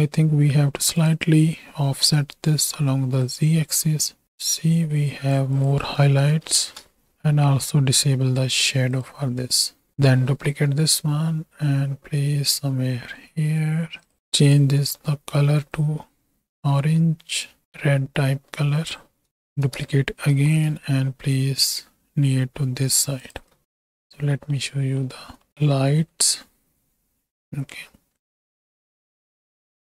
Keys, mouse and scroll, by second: 1.0 click, 3.3-5.4 shift+drag, 6.0 click, 8.9 click, 10.5 shift+d, 14.3 click, 19.3 shift+click, 20.3 shift+d, 23.2 click, 23.4 z, 23.9 z, 24.7 click, 25.4 middle click, 25.5 ctrl+space, 25.6 click, 25.7 middle drag, 25.8-27.7 drag, 28.1 z, 28.9 z, 29.4-29.8 drag.